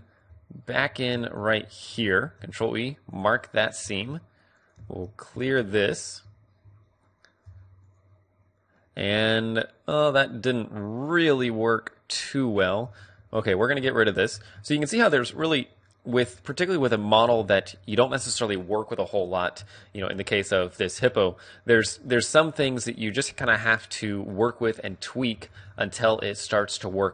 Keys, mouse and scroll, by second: 0.5 right click, 0.8 middle click, 0.8 a, 1.1-2.9 right drag, 2.2 ctrl+e, 4.0 a, 4.5-7.2 right drag, 5.3 ctrl+e, 6.1 a, 6.6 a, 7.4 u, 9.6 middle click, 12.1 middle click, 12.8 a, 13.4-15.5 right drag, 15.5-17.3 middle drag, 19.5 a, 20.1 middle click, 20.8-23.7 middle drag, 20.9 a, 21.6 u, 24.2 middle click, 25.5 a.